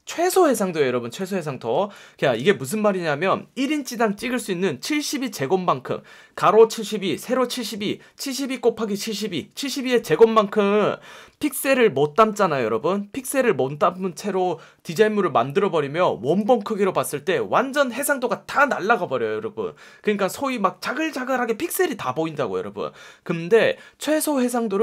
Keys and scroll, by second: 1.7 space.